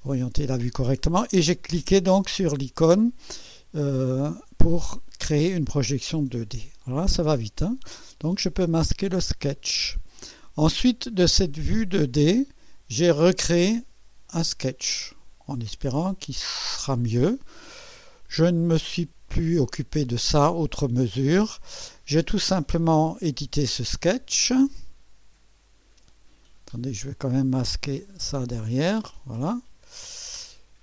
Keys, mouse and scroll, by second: 5.9 click, 8.6 click, 9.7 space, 11.4 click, 14.3 click, 24.4 click, 27.0 click, 27.7 click, 28.2 space, 29.9 click, 30.6-30.8 scroll up 3.